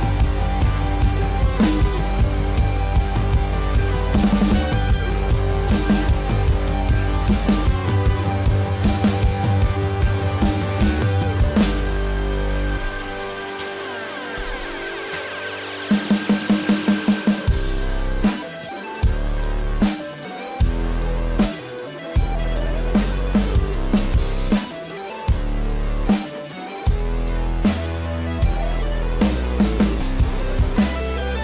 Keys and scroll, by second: 1.0 ctrl+-, 6.3 space, 13.2 space, 17.5 space, 28.5 ctrl+=, 28.6 ctrl+-, 29.0 ctrl+=, 30.3 ctrl+-.